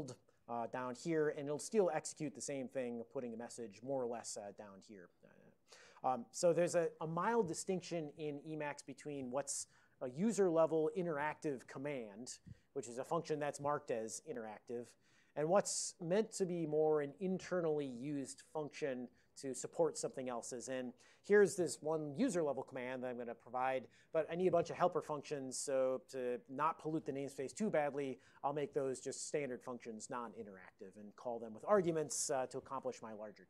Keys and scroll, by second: 0.0-0.8 typing.